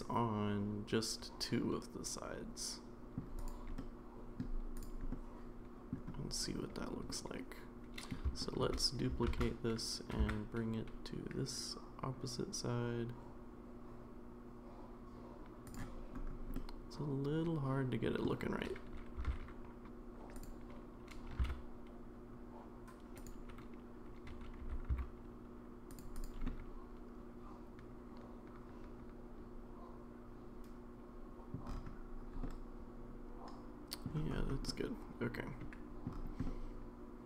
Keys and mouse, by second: 3.4 click, 3.8-4.4 middle drag, 5.1-5.9 middle drag, 7.1-8.1 middle drag, 8.4 shift+middle drag, 9.3 shift+d, 16.5-18.2 middle drag, 19.2 r, 21.3 g, 24.6 r, 26.1 click, 26.5-31.5 middle drag, 32.4-34.0 middle drag, 34.7-36.0 middle drag, 36.4-37.2 middle drag.